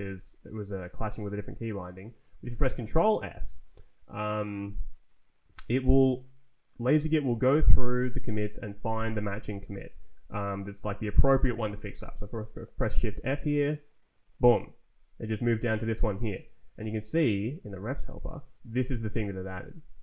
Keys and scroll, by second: 13.0 shift+f, 16.4 Return, 16.9 Down, 17.4 Up.